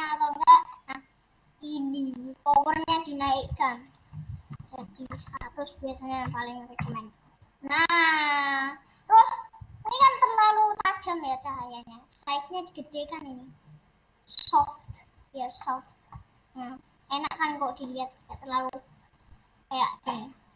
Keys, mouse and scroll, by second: 3.0-6.8 drag, 6.8 0, 7.7-10.2 middle drag, 10.2-11.1 scroll up 6, 11.1-11.5 scroll down 4, 12.3-15.4 drag, 15.4 scroll down 2, 15.5 middle click, 16.1-16.7 scroll up 3, 17.3-19.8 middle drag, 19.8-20.5 drag.